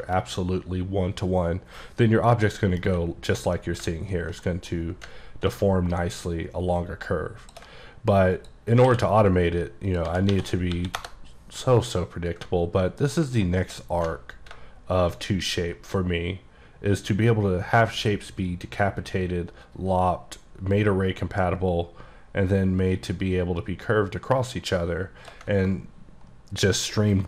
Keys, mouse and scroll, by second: 2.6 middle click, 3.7 middle click, 5.2 ctrl+middle click, 6.0 ctrl+shift+click, 9.0 q, 10.0 click, 10.1-11.0 typing, 12.5 ctrl+KP_Enter, 13.1 click, 15.3 ctrl+shift+click.